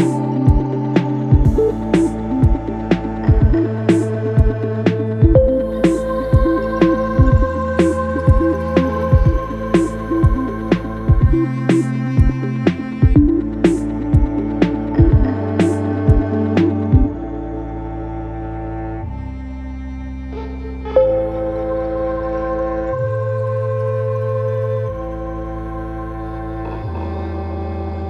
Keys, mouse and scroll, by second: 2.4-8.8 drag, 8.8-14.4 drag, 14.4-28.0 shift+drag.